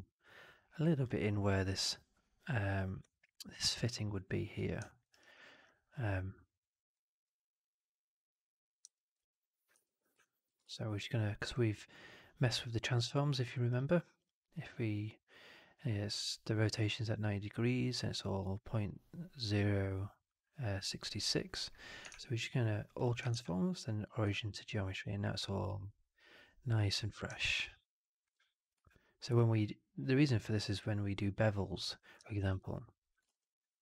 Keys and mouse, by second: 4.8 alt+middle click, 5.0 alt+right click, 5.2 alt+click, 6.7 click, 8.8 alt+middle click, 9.6 4, 10.1 alt+click, 10.5 shift+Tab, 13.6 click, 14.1 click, 22.0 shift+Tab, 23.2 shift+Tab, 27.3-28.1 alt+middle drag, 28.6 e, 32.3 ctrl+z, 33.2 ctrl+z.